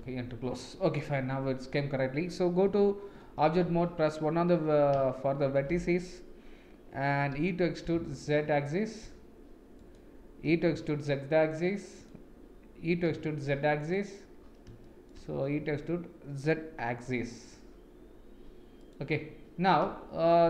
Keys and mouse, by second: 0.0 KP_Enter, 0.0 n, 2.7 Tab, 3.7 1, 5.1-5.6 shift+middle drag, 7.9 e, 10.5 e, 12.9 e, 14.8 shift+middle click, 15.6 e, 19.8 middle click.